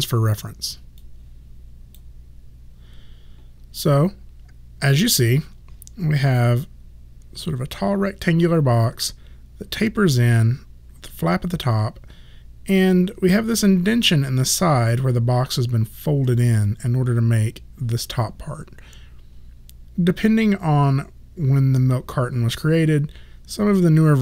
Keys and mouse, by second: 1.1 click.